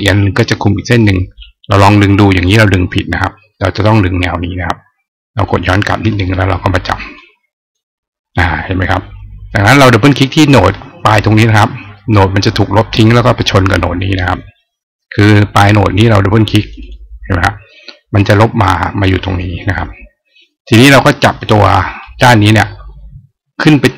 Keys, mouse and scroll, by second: 0.8 click, 5.1 click, 7.0 click, 16.4 click, 16.6 click, 21.8-23.9 drag.